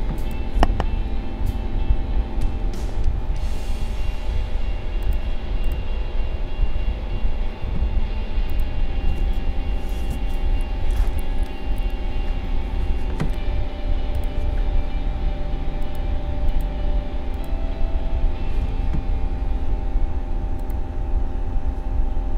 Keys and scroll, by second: 1.4 ctrl+-, 2.5 ctrl+0.